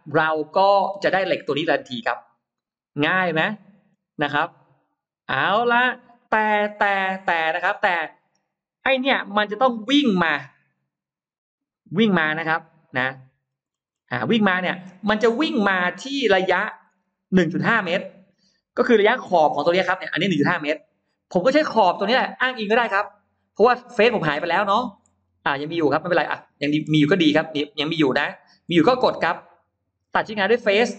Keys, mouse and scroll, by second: 0.1-1.0 scroll down 1, 1.0-2.7 scroll up 4, 2.5-3.6 middle drag, 3.6-4.6 scroll down 2, 5.3-6.0 scroll up 4, 6.0 middle click, 6.7-7.8 scroll up 4, 8.0 middle click, 9.1 shift+x, 9.9-12.3 drag, 12.7 shift+right click, 13.3-14.4 scroll down 6, 14.2 middle click, 14.9-15.6 scroll up 4, 16.1-16.4 scroll up 2, 16.7-17.3 scroll down 1, 17.7-19.9 scroll up 5, 22.3 scroll down 2, 23.9-25.1 scroll down 6, 26.3-26.6 scroll up 2, 26.5 middle click, 30.3 click.